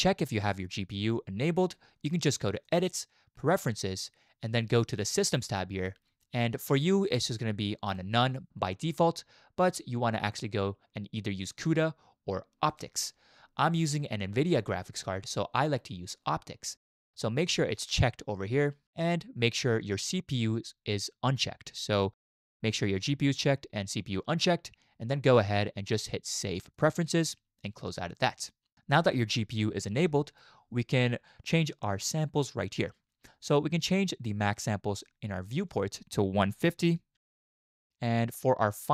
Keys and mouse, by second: 2.7-3.5 drag, 35.5-37.8 drag.